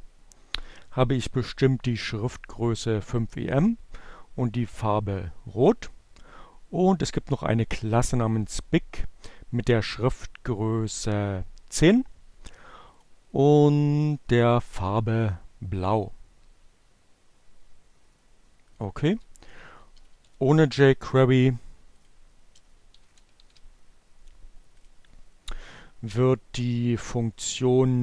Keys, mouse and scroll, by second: 11.9 click, 18.0 click, 18.3-20.3 typing, 21.0 click, 21.8 space, 22.0 -, 22.7 shift+,, 24.2 click, 25.5-27.1 drag.